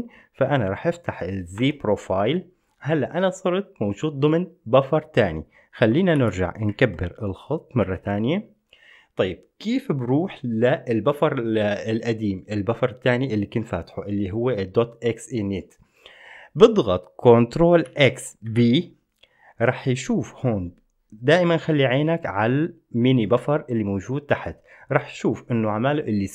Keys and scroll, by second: 1.9 Return, 6.4 ctrl+x, 18.1 ctrl+x, 18.6 b.